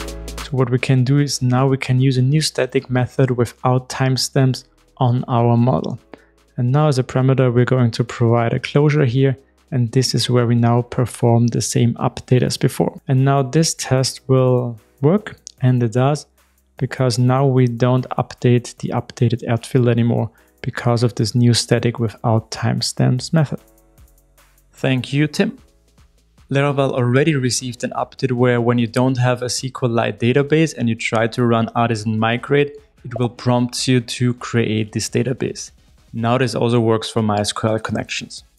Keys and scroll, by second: 1.9 super+v, 3.7 super+x, 14.0 ctrl+shift+r, 17.3 shift+super+F12.